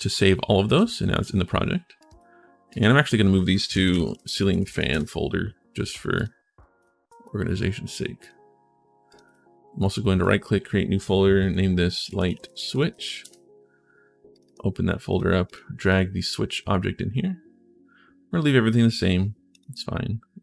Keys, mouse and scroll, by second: 0.4 click, 1.8 click, 2.5 click, 3.6-5.0 typing, 5.9 click, 6.6 shift+click, 7.0 click, 8.0 click, 8.9 click, 9.0 click, 10.0 click, 11.8-13.3 typing, 14.1 click, 14.9 click, 15.2 click, 15.7 click, 19.3 click.